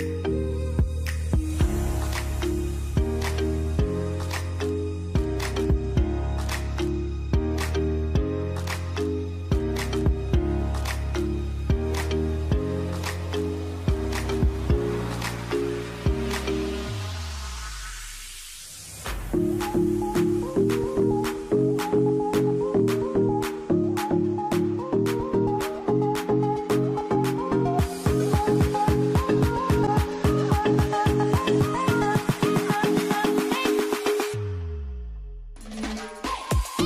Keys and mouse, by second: 1.4-2.9 shift+middle drag, 6.7 click, 7.5 click, 8.1 click, 8.7-9.8 drag, 11.3 alt+a, 11.6 shift+middle click, 12.2 k, 13.4 ctrl+r, 14.2 alt+a, 15.3 shift+middle click, 18.0 click, 18.8 m, 19.5 alt+a, 20.0 middle click, 21.0 shift+middle click, 21.7-28.6 middle drag, 28.6 KP_1, 29.3 shift+middle click, 30.5 ctrl+r, 31.7 k, 34.7 alt+a, 35.8 ctrl+right click, 36.1 alt+a.